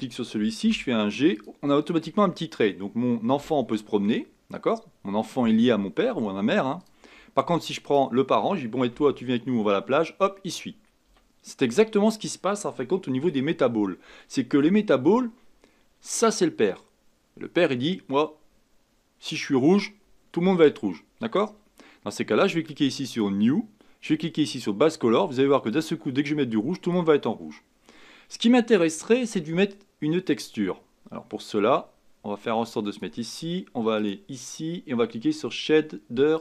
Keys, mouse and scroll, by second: 0.6 g, 1.7-3.4 middle drag, 3.4 g, 7.1-7.8 scroll down 1, 7.8 click, 8.9 g, 11.9-12.8 scroll down 4, 12.9 shift+middle click, 13.6-14.2 scroll up 6, 14.2-14.9 shift+middle drag, 14.9 scroll down 1, 16.1 click, 23.1-24.6 drag, 27.4-27.9 scroll down 3, 27.9-31.0 middle drag, 31.5-36.4 drag.